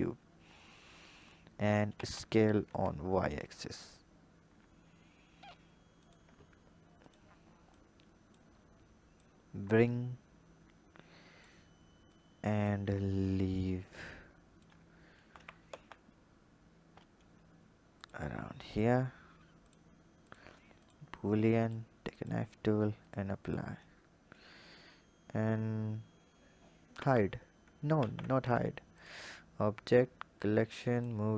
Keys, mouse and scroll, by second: 0.4 scroll down 1, 1.2-1.7 scroll down 3, 1.7 s, 6.9 drag, 7.6 click, 9.0 click, 11.9 click, 12.7-13.7 scroll up 2, 13.7 click, 15.1 g, 18.5 click, 19.4 click, 20.0-21.5 drag, 22.9-23.3 drag, 26.7 h, 27.7 ctrl+z, 28.8-31.3 drag.